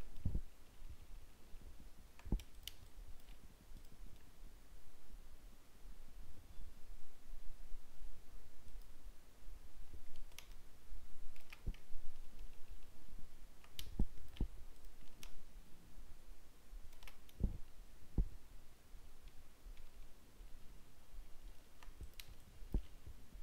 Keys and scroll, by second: 0.7 ctrl+d, 12.0 ctrl+d, 19.2 ctrl+d.